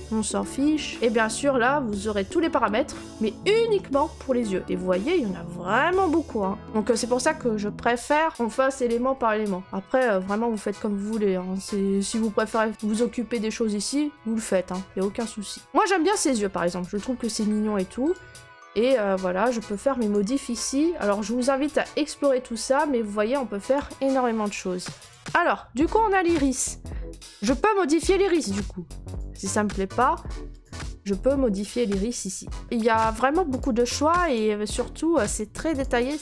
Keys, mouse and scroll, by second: 0.2 scroll, 0.9 click, 2.1-3.3 scroll, 4.0-6.6 scroll, 9.0-11.0 scroll, 11.0-11.5 scroll, 14.2-14.7 scroll, 15.6 click, 16.1 right click, 16.6 scroll, 16.7 middle click, 18.4 scroll, 20.0 click, 25.0 click, 26.2 scroll, 27.1 scroll, 28.3 middle click, 28.4 middle click, 29.1 click, 29.6 middle click, 29.6 middle click, 29.7 middle click, 29.7 middle click, 30.6 click, 31.6 right click, 31.9 middle click, 32.0 middle click, 32.0 middle click, 32.1 middle click, 32.6 right click, 32.8 middle click, 32.9 middle click, 32.9 middle click, 33.5 click, 34.3 click, 34.8 middle click, 34.9 middle click, 34.9 middle click, 34.9 middle click, 35.7 click.